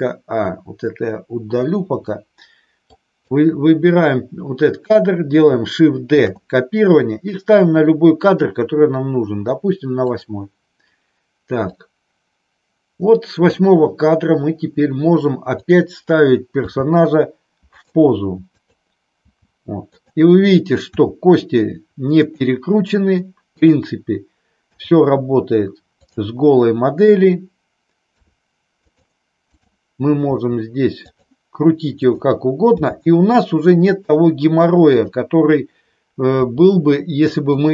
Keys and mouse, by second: 1.4 Delete, 3.0-3.3 drag, 6.2 shift+d, 10.0 click, 11.7-13.4 drag, 16.6 g, 17.7 click, 18.4 click, 19.2 g, 19.8 click, 20.8 r, 22.1 click, 24.7 g, 26.0 click, 28.1 r, 28.8 click, 29.4-30.0 drag, 30.2 r, 31.1 click, 31.8 click, 32.7 g, 33.8 click, 36.3 r, 37.6 click.